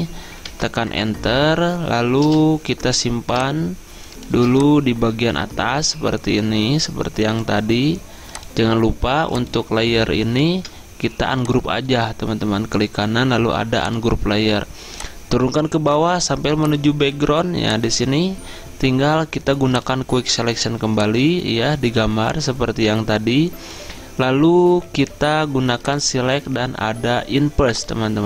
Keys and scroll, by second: 0.5 Return, 2.3 v, 10.6 Return.